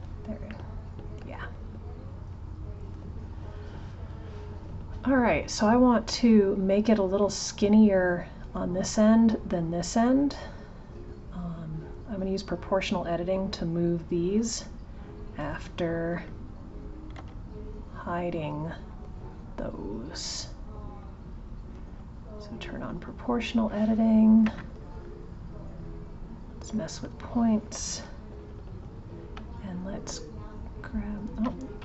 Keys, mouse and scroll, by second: 0.5-2.3 middle drag, 2.3 click, 22.5 click, 25.1 click.